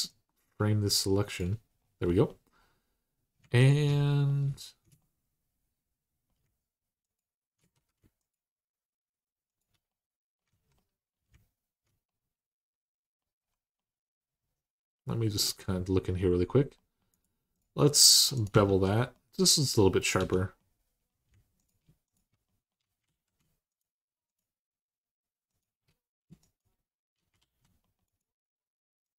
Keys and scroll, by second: 7.5 ctrl+z, 10.3 ctrl+z, 18.3 Tab, 20.0 Tab, 22.8 alt+z, 27.2 alt+z.